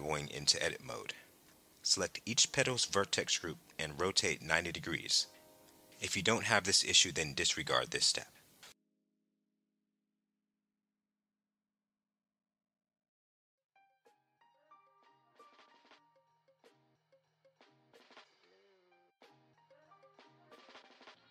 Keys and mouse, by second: 0.0 Tab, 0.7 click, 2.4 click, 6.7 click, 8.9 r, 9.6 KP_9, 9.8 KP_0, 10.3 KP_Enter, 12.9 click, 17.6 click, 19.7 r, 20.3 KP_9, 20.5 KP_0, 20.8 KP_Enter.